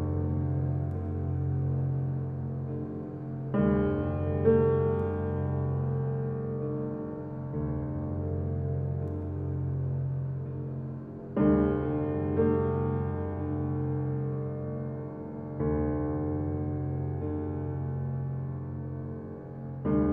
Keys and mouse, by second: 0.3 click, 1.0 typing, 1.1 Tab, 1.6-2.7 drag, 2.8 g, 3.3 x, 4.5 click, 5.4-6.1 typing, 6.9-10.8 drag, 7.9-8.7 typing, 10.2-11.2 typing, 12.4 click, 12.9-14.0 typing, 14.0-16.8 ctrl+alt+drag, 17.2 alt+click, 18.9 typing, 19.0-19.5 alt+drag, 19.7-20.1 ctrl+alt+middle drag.